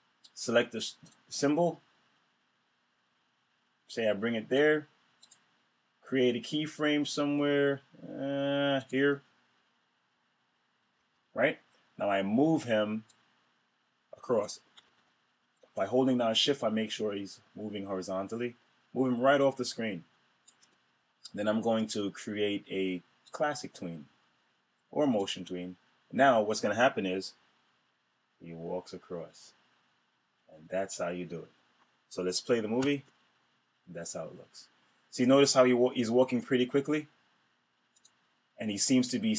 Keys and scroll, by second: 14.7 super+z, 32.7 super+Return.